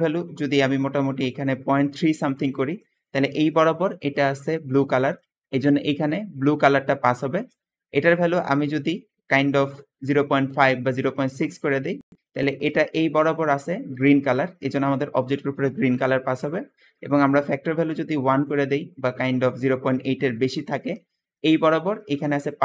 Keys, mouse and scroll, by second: 7.2 Escape, 12.6 Escape, 12.6 Escape, 13.0 Escape, 16.3 Escape, 19.9 `, 20.5 click, 21.2 click, 22.0 click, 22.4 click.